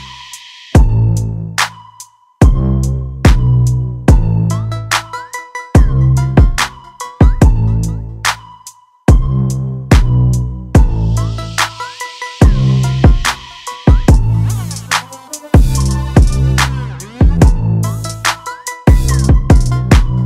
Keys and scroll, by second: 11.7 ctrl+g.